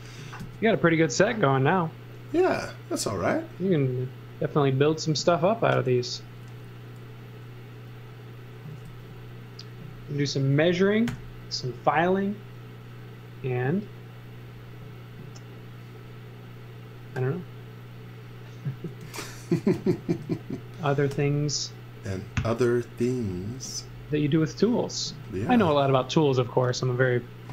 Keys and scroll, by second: 0.4 c, 7.8 x, 8.8 z, 11.0 i, 19.0 e, 21.1 i, 25.1 z, 26.8 x.